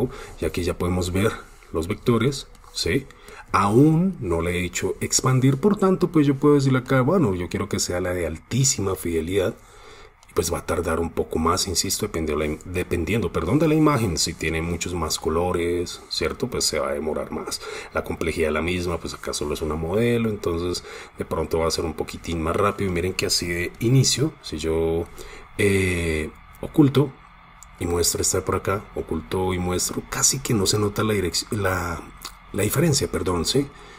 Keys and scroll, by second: 0.5 super+space, 1.5 super+space, 2.1 super+space, 3.2 super+space, 23.8 super+space.